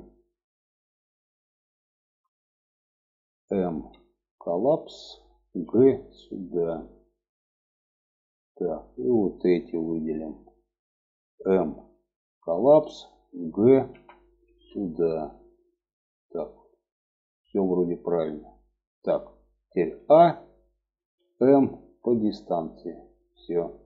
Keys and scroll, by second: 3.2 m, 5.0 g, 11.1 m, 13.3 g, 19.3 a, 20.6 m.